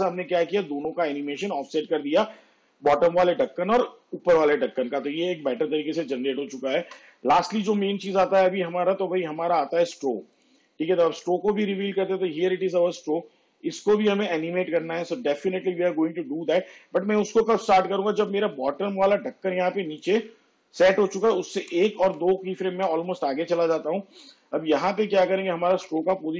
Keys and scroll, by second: 6.9 space, 21.7 ctrl+Left, 26.0 p.